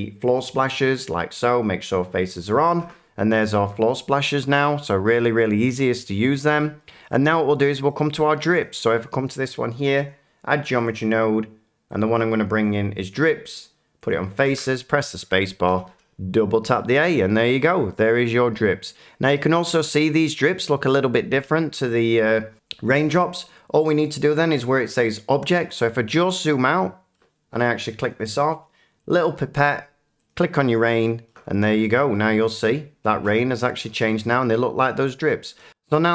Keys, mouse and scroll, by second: 0.3 click, 2.0 click, 2.6 middle click, 2.8 scroll, 3.6 shift+middle click, 6.4-6.8 scroll, 7.0 middle click, 7.5 shift+middle click, 7.9 middle click, 8.6 click, 10.0 click, 10.8 click, 11.9 click, 12.7 click, 14.1 click, 14.4 a, 16.6 middle click, 17.0 shift+middle click, 27.1 shift+middle click, 28.1 click, 29.1 click, 30.2 click, 31.2 shift+middle click, 32.1 shift+middle click, 35.5 middle click.